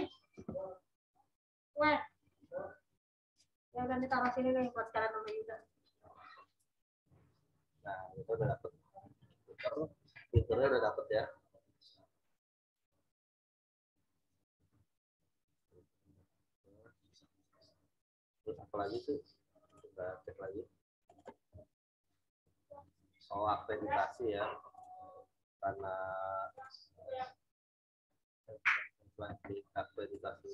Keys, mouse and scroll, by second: 15.9 click, 18.8 click, 19.7 click, 24.7 click, 27.3 scroll up 1, 30.1 click.